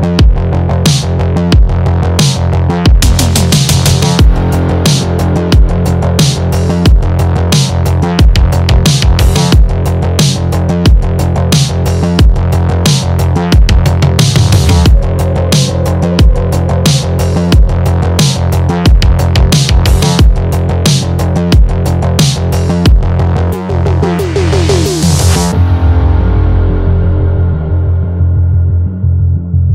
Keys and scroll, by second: 23.3 Up, 24.0 shift+Right, 25.1 shift+Down, 25.7 Down.